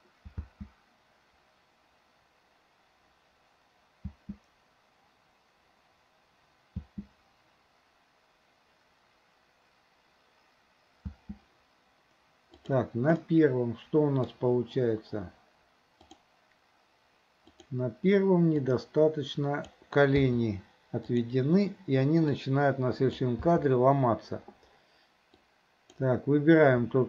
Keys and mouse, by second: 0.5 space, 4.1 space, 11.1 space, 12.7 click, 13.2-14.3 middle drag, 16.0 click, 17.5 click, 18.6-19.8 drag, 20.3 i, 21.1 click, 22.5-23.2 drag, 25.4-26.0 drag.